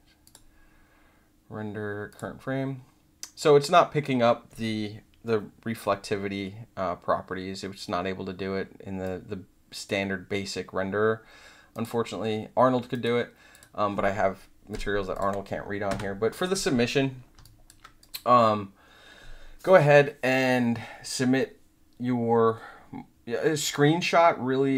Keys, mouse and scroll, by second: 0.2 click, 2.0 click, 9.0 click, 11.7 click, 12.9 click, 13.5 click, 14.7 click, 15.1 click, 15.8 Delete, 16.3 click, 17.4 alt+click, 17.9 click.